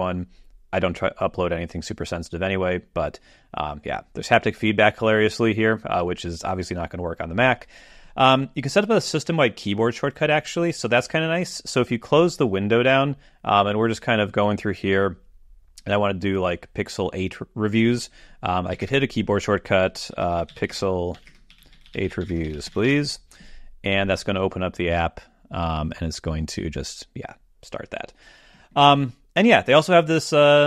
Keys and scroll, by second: 18.8 ctrl+alt+super+space.